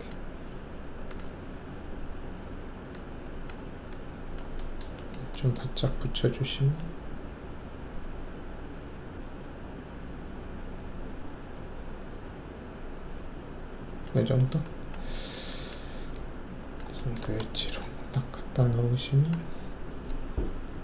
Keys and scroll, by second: 5.8 alt+w, 17.5 alt+shift+F1.